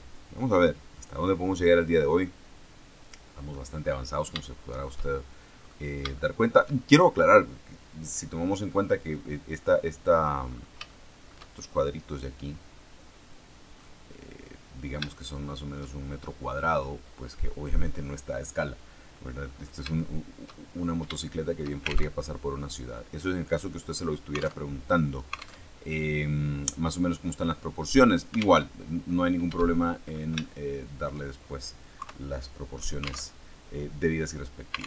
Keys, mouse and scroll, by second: 0.8 click, 2.2-3.6 middle drag, 4.0-4.3 scroll up 3, 4.3 shift+middle click, 5.5-5.9 scroll up 2, 6.0-7.2 shift+middle drag, 8.6-9.7 middle drag, 9.8 middle click, 10.4-10.7 scroll up 2, 10.8 shift+middle click, 13.7 middle click, 15.0 shift+middle click, 16.1-16.7 shift+scroll down 3, 16.7 middle click, 17.6-18.0 scroll down 2, 18.3-19.3 middle drag, 19.3-19.9 scroll up 3, 19.9 shift+middle click, 20.7 shift+scroll down 3, 21.1 shift+middle click, 22.1 alt+shift+Tab, 24.6 alt+Tab, 25.6 alt+Tab, 28.6 alt+Tab, 29.7 shift+middle click, 30.3 shift+middle click, 31.9 KP_3, 33.2 alt+Tab.